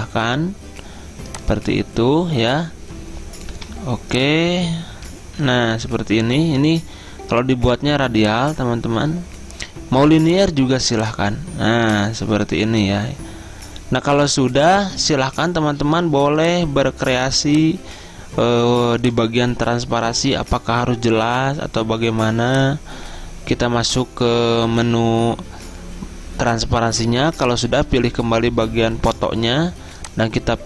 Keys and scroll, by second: 3.6 g.